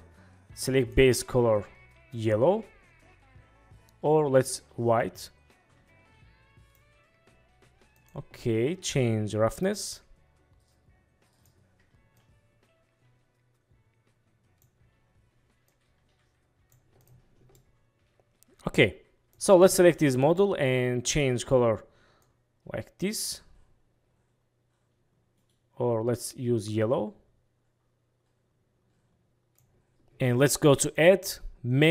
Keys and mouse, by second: 0.9 click, 8.1 click, 9.2-11.6 drag, 12.3-14.7 drag, 15.8-16.9 drag, 17.8-19.3 middle drag, 20.2 click, 21.2 click, 31.1-31.9 drag.